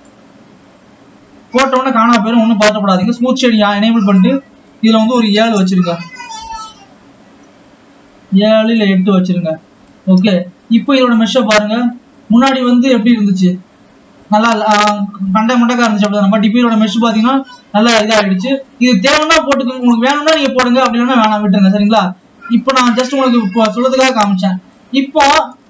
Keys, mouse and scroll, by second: 0.4-1.9 drag, 1.9-3.4 scroll down 5, 4.6-7.3 drag, 7.3 scroll up 2, 8.9-9.7 drag, 10.1-10.4 scroll down 2, 11.2 alt+a, 11.7 click, 12.5-13.3 scroll up 2, 13.9 scroll down 2, 18.5-19.4 scroll down 3, 20.7 click, 22.2 click, 23.6 Tab, 25.2 click.